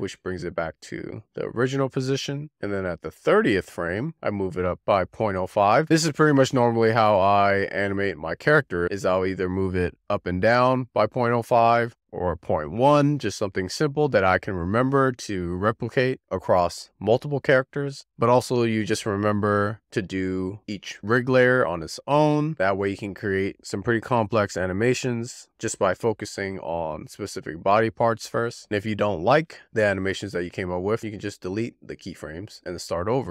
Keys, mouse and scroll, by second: 2.4 z, 2.7-4.3 drag, 10.0-15.2 drag, 18.9-25.4 drag, 25.4 shift+d, 27.6-32.9 drag.